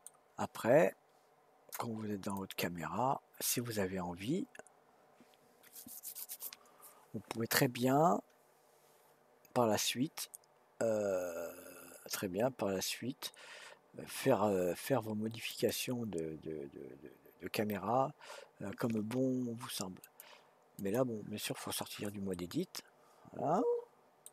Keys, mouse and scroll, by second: 2.3 click, 15.5 click, 20.0-22.3 drag, 22.3-24.3 middle drag.